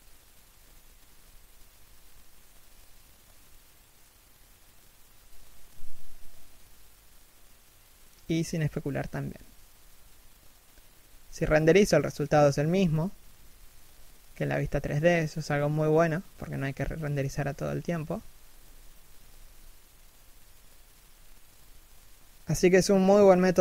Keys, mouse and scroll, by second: 3.4 scroll up 1, 3.8 g, 15.3 right click.